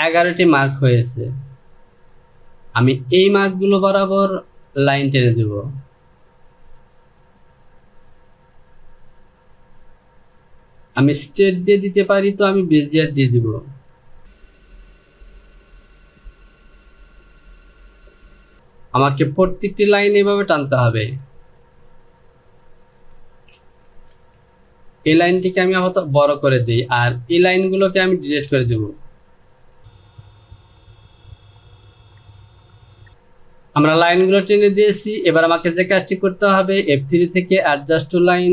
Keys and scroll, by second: 23.5 ctrl+z, 28.1 Delete.